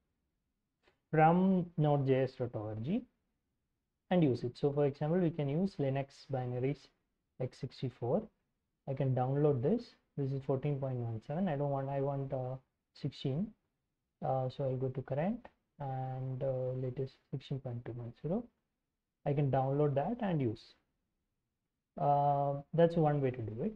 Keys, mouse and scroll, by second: 2.5 scroll down 4, 3.5 scroll down 2, 12.3-12.9 scroll up 2, 17.3-18.6 scroll down 4, 21.0-21.5 scroll down 2.